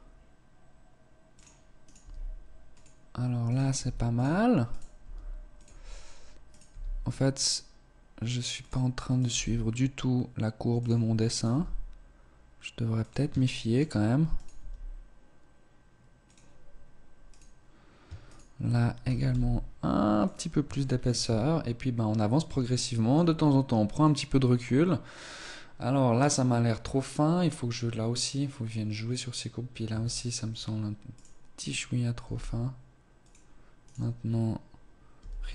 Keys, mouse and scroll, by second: 1.7 right click, 1.9 g, 3.3 right click, 3.6 g, 4.6 right click, 4.9 g, 6.4 right click, 6.6 g, 8.5 right click, 8.5 g, 11.2 right click, 11.4 g, 13.4 shift+middle click, 14.1 right click, 14.1 g, 17.2 right click, 18.1 shift+right click, 18.9 g, 20.6 shift+middle click, 20.7 Tab, 21.4-22.2 scroll down 2, 22.2 shift+middle click, 29.8 Tab, 30.4-31.3 scroll up 1, 31.3 right click, 31.3 g, 33.7 right click, 35.0 g.